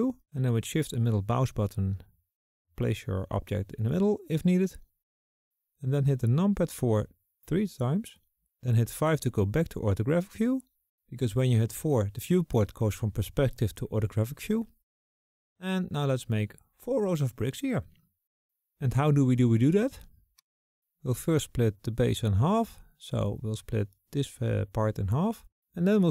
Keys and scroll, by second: 5.3 KP_4, 5.8 KP_4, 7.3 KP_5.